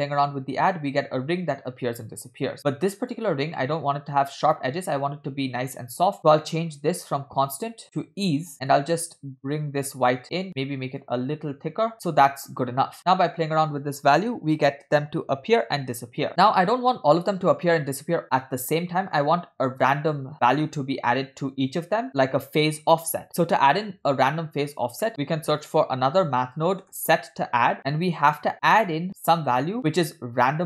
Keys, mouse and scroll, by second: 3.5-4.2 scroll up 5, 6.2 scroll down 4, 6.4 middle click, 7.5-8.2 drag, 8.8 click, 10.3 click, 11.0 click, 11.9 middle click, 11.9 scroll down 2, 12.7 scroll up 1, 13.0-16.3 drag, 16.3 scroll down 4, 24.9 scroll down 2, 25.1 middle click, 25.2 shift+a, 27.8 middle click, 27.8 scroll up 2.